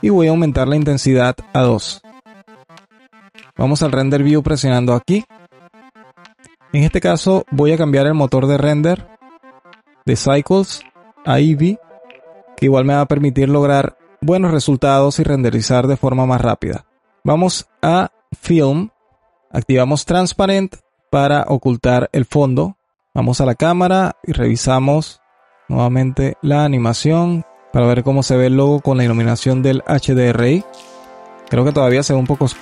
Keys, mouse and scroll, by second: 4.9 click, 8.8 click, 10.8-13.4 drag, 18.5-21.1 drag, 21.3 click, 23.2 KP_0, 25.4-27.9 drag, 29.2-32.6 drag.